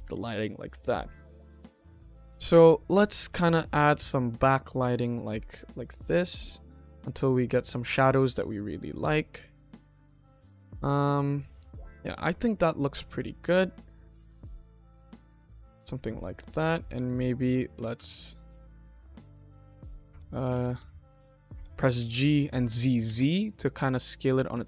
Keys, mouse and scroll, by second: 0.6 KP_0, 1.0 middle click, 1.7 KP_1, 2.2 middle click, 3.2 r, 6.9-7.6 middle drag, 7.6 KP_1, 8.2 r, 9.4 click, 9.8 middle click, 10.3 scroll up 1, 10.9 scroll up 1, 11.2 middle click, 12.3 click, 12.8 click, 13.8 KP_1, 14.7 r, 15.4 click, 15.7 middle click, 16.2 click, 16.8 KP_1, 17.6 g, 19.5 z, 20.3 g, 21.9 g.